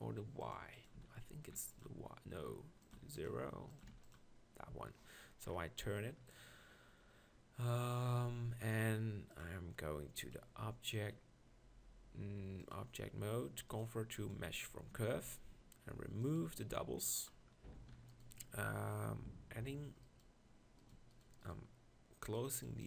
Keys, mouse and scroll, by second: 8.2 middle click, 15.0 Tab, 18.4 ctrl+r.